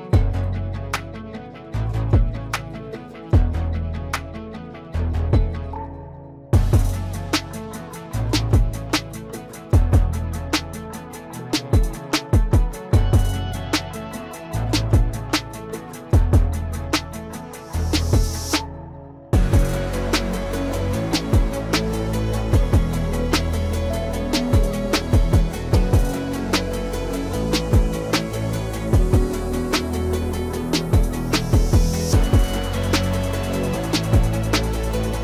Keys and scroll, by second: 34.5 ctrl+s.